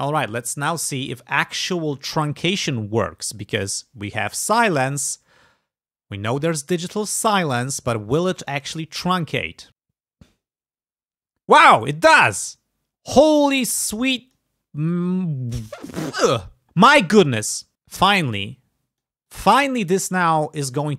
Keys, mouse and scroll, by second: 0.3 alt+e, 1.3 click, 1.6 click, 2.1 alt+e, 7.2 click, 8.2 click, 8.6 click, 12.5 click, 13.7 click, 16.7 click, 17.2 click, 17.6 click, 17.8 click, 18.1 click, 18.6 click, 19.3 click, 20.5 click.